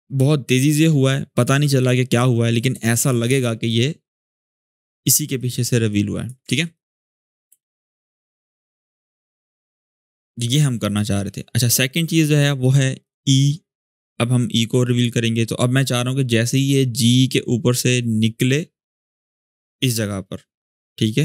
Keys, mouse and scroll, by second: 1.1 click, 3.0 space, 5.1 click, 6.2 ctrl+z, 6.5-7.4 click, 7.2 shift+space, 9.2-10.8 drag.